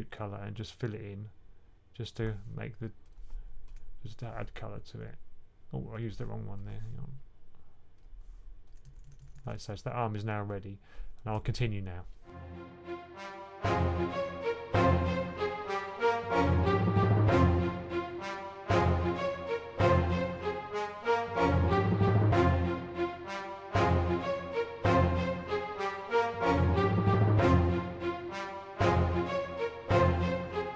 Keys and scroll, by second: 8.7-9.2 typing, 12.8 1, 14.7-15.4 typing, 16.5-17.3 typing, 19.0 typing, 19.9 super+z, 20.6-21.6 typing, 23.1-24.3 typing, 29.3 typing.